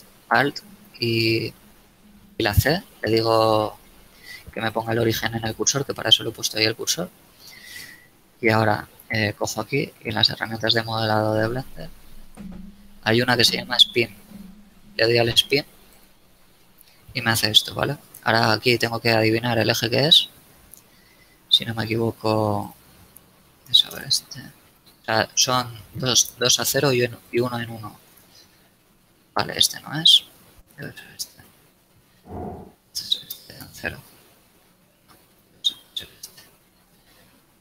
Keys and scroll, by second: 1.3 ctrl+alt+shift+c, 7.7 shift+Tab, 8.4 shift+a, 23.9 KP_Enter, 28.2 KP_Enter, 33.6 KP_Enter, 36.6 KP_1, 37.2 KP_Enter.